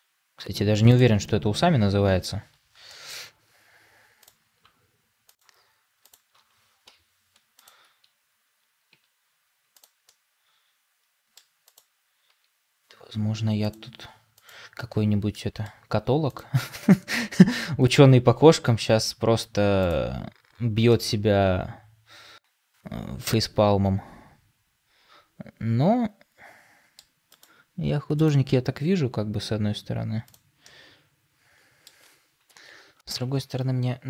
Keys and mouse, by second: 1.2-2.2 middle drag, 2.8 middle click, 4.1 click, 8.8 s, 9.9-11.3 middle drag, 12.2 s, 15.2-15.6 middle drag, 18.2 s, 20.8-26.9 middle drag, 27.3 click, 28.8 s, 30.5-31.8 middle drag, 32.4 KP_3, 33.0 Tab.